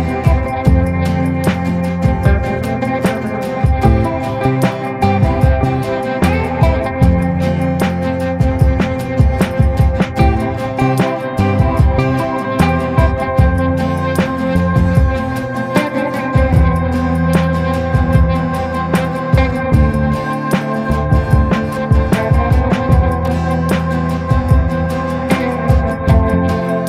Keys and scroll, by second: 0.9 c, 11.1 F8, 11.7 shift+Home, 12.9-17.6 typing, 18.3 ctrl+space, 19.3 c, 20.1 Escape, 20.3 F2, 21.9 Escape.